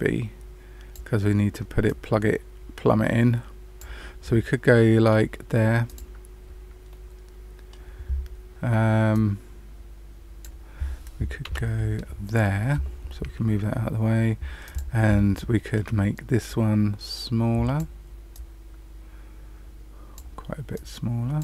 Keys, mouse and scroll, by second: 1.8 click, 4.2 middle click, 5.8 click, 6.8 middle click, 9.1 click, 11.4 Delete, 14.6 click, 15.1 shift+middle click, 16.4 click, 18.3 click, 20.7 click.